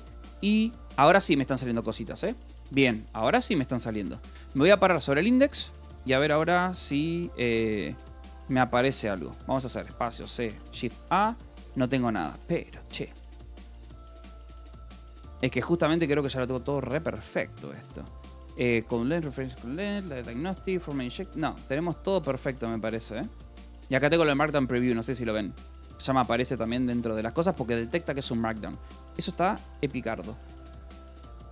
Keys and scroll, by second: 1.8 shift+a, 2.2 j, 3.7 space, 3.8 c, 4.4 a, 5.5 space, 5.6 c, 6.0 BackSpace, 6.9 Escape, 7.8-12.5 typing, 13.8 k, 14.2 space, 14.4 c, 29.6-31.5 typing.